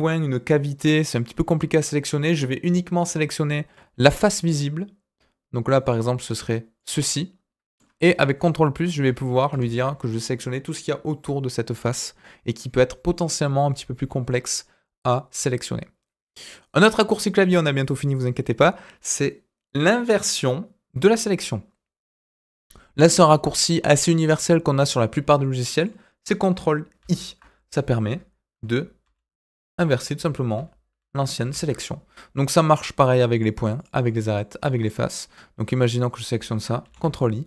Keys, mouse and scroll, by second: 5.8 click, 6.7 click, 7.1 middle click, 8.4 ctrl+KP_Add, 8.7 ctrl+KP_Add, 23.8 middle click, 24.9-25.3 scroll up 2, 25.4 scroll down 2, 25.5 middle click, 26.9 ctrl+i, 29.0-31.6 ctrl+i, 33.3 click, 33.7 click, 34.0 middle click, 34.6 click, 35.0-36.1 middle drag, 36.8 ctrl+i.